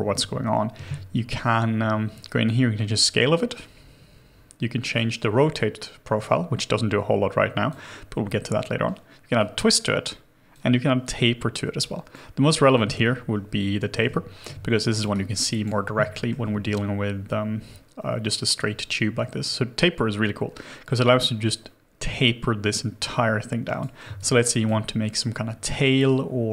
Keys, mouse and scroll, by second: 12.6 double click, 13.9 Return, 14.7 alt+click, 15.1 alt+right click, 15.5 alt+click, 16.1 alt+middle click, 24.1 alt+click.